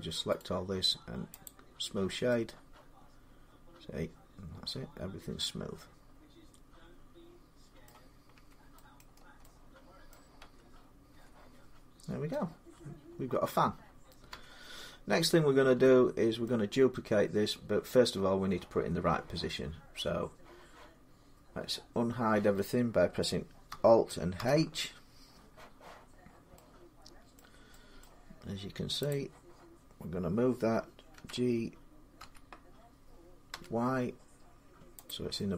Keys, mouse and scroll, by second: 0.2 right click, 1.2 click, 7.6 middle click, 8.1 Tab, 8.8 middle click, 8.8-9.2 scroll down 4, 9.9 middle click, 10.2 Tab, 10.9 Tab, 11.8 scroll down 2, 12.1 scroll, 13.3 middle click, 14.1 Tab, 14.9-15.6 scroll down 4, 16.2 middle click, 19.1 middle click, 23.5 middle click, 24.2 alt+h, 26.0 scroll, 27.1-27.6 scroll up 6, 27.2 middle click, 27.8 middle click, 28.9 click, 30.9 g, 32.0 x, 32.3 scroll, 33.3 y, 34.9-35.5 drag.